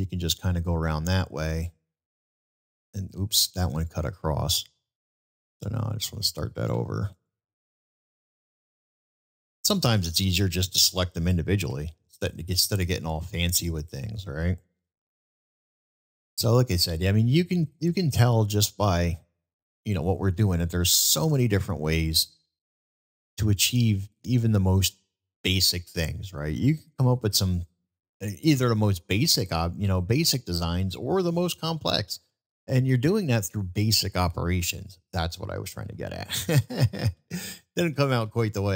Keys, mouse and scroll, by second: 2.5 ctrl+click, 5.5 click, 8.5 ctrl+click, 9.4 ctrl+click, 10.1-10.7 middle drag, 12.6 middle click, 14.1 middle click, 15.9-16.8 middle drag, 17.9-19.2 middle drag, 19.8-20.2 middle drag, 21.6-22.0 middle drag, 22.7-23.3 middle drag, 24.0-24.6 middle drag, 26.0-27.2 middle drag, 29.7-30.1 middle drag, 30.8-31.3 middle drag, 32.3-32.7 middle drag, 35.6 middle click, 36.6-38.3 ctrl+z.